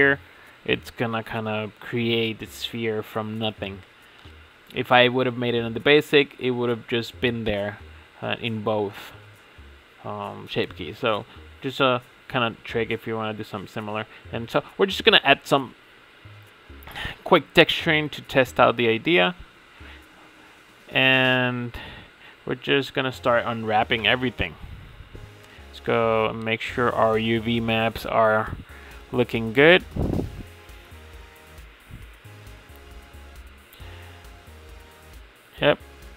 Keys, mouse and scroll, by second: 0.3-0.7 scroll up 1, 0.7 shift+middle click, 0.9 scroll up 1, 1.2-1.5 middle drag, 1.5-3.4 scroll up 3, 3.4 click, 8.5-11.7 drag, 11.5 middle click, 14.4-16.3 drag, 16.6-18.0 middle drag, 18.0 scroll down 5, 18.3-19.0 shift+middle drag, 19.0-19.4 scroll up 5, 19.4-19.9 shift+middle drag, 19.9 click, 20.3-20.7 scroll up 6, 20.7 Tab, 21.1-21.4 shift+middle drag, 21.4 a, 23.3 u, 25.4-28.3 drag, 28.3 middle click, 32.4-32.7 middle drag.